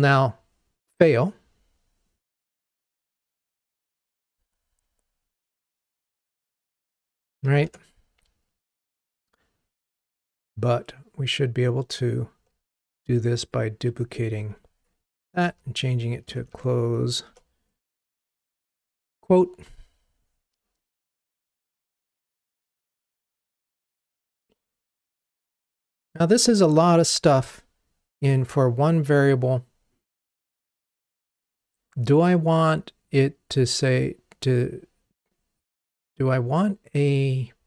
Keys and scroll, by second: 7.8 ctrl+Tab, 13.0 super+d, 18.6 ctrl+r.